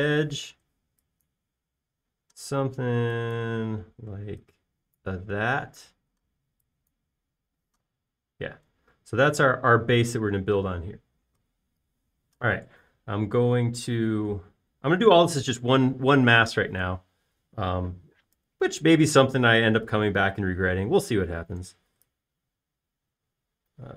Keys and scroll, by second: 0.3 e, 9.3-9.7 typing, 15.6 r.